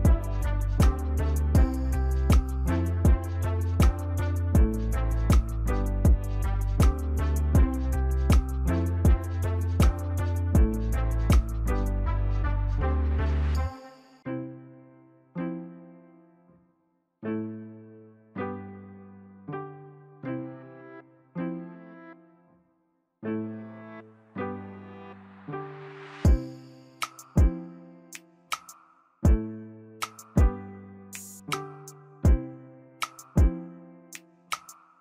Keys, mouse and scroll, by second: 1.6 ctrl+z, 13.4 right click, 19.9 ctrl+z, 20.5 ctrl+z, 21.4 ctrl+z, 22.2 ctrl+z, 23.4 ctrl+z, 24.2-27.0 scroll up 7, 32.4 right click.